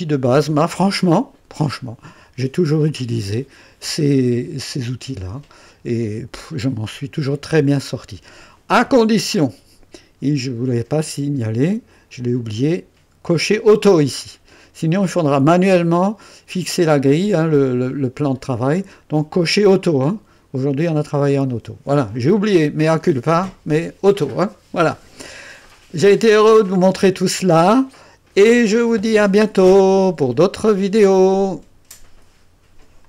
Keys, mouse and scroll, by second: 6.8 scroll down 1, 25.2 scroll down 2, 26.1-26.5 scroll up 1, 26.8-27.6 right drag, 27.9 scroll down 2, 31.9 right click, 33.0 click.